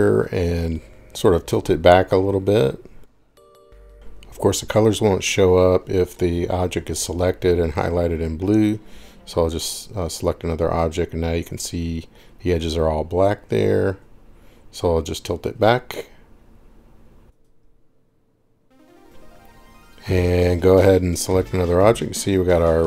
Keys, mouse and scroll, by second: 1.8 click, 7.0 click, 8.4 Escape, 9.1 click, 9.9 click, 14.2 click, 15.6 click, 17.5 click, 20.2 click, 20.7 click, 22.4-22.8 scroll.